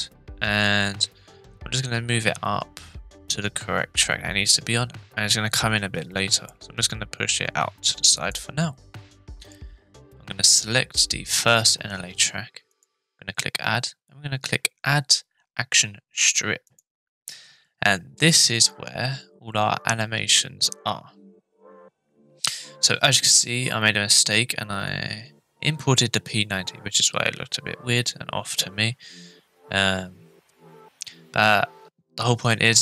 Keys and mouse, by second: 8.2 click, 9.4 click, 12.7-16.6 drag, 19.5-32.8 drag.